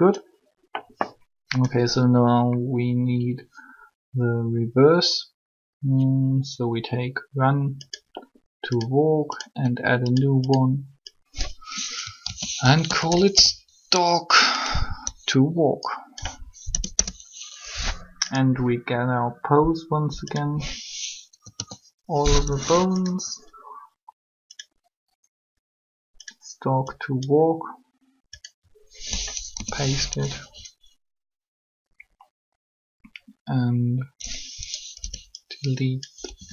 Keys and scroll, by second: 12.2 shift+s, 16.6 BackSpace, 16.7 Return, 21.2 a, 21.3 a, 29.5 3, 35.0 b, 36.3 Delete.